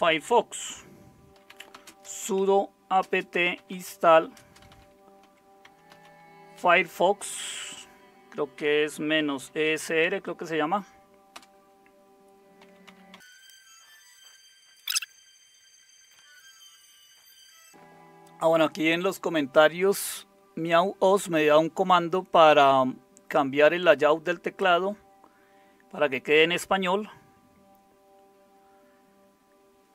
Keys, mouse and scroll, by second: 1.1-7.5 typing, 8.6-13.9 typing, 14.9 Return.